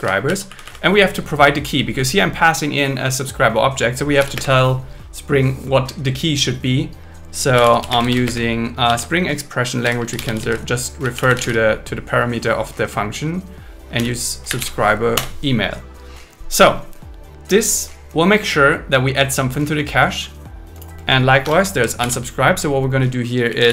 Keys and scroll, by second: 0.5 Right, 4.3 space, 7.9 space, 8.1 shift+0, 8.3 space, 8.9 shift+2, 15.1 Return, 21.4 Return, 22.0 alt+l, 23.5 shift+c.